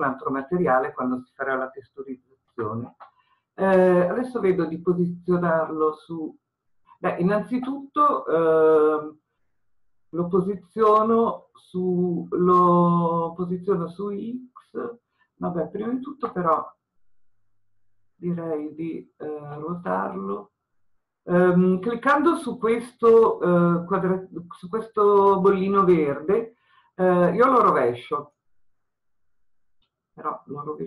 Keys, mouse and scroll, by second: 28.3-30.8 drag.